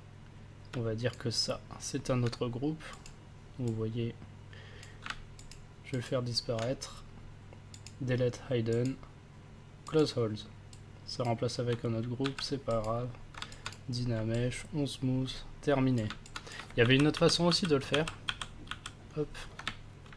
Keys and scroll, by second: 5.5 ctrl+s, 12.2 ctrl+v, 16.8 ctrl+z.